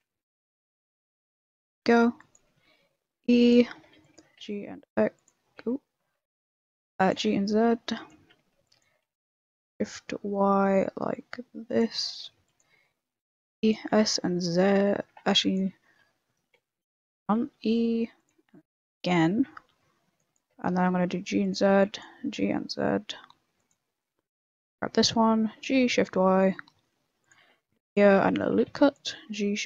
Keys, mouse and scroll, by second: 0.0-0.4 typing, 2.0 b, 2.4 e, 3.7 a, 3.9 b, 4.1 g, 5.6 ctrl+z, 6.7 a, 6.9 b, 7.1 g, 8.3 a, 8.5 b, 8.8 g, 12.3 b, 12.7 e, 13.7 s, 15.0 a, 15.3 b, 15.6 g, 16.5 ctrl+z, 16.7 ctrl+z, 17.4 e, 18.3 e, 19.3 a, 19.7 b, 20.4 g, 21.5 a, 21.7 b, 22.1 g, 24.2 a, 24.4 b, 25.5 g, 27.3 a, 27.5 ctrl+r, 28.5 a, 28.6 b, 28.9 g.